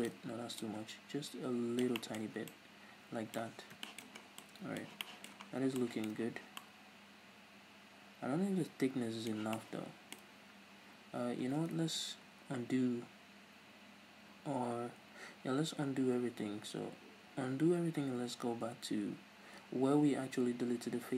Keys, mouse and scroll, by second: 0.1 shift+right click, 0.6-2.0 drag, 2.0-21.1 middle drag, 2.2 Tab, 2.4 scroll down 2, 3.4 scroll up 2, 3.5-3.8 scroll down 2, 4.0 scroll up 2, 4.2 scroll down 2, 5.4-5.8 scroll down 2, 6.4 scroll down 1, 10.3-11.2 scroll up 2, 11.2-13.9 scroll down 2, 13.9 ctrl+z.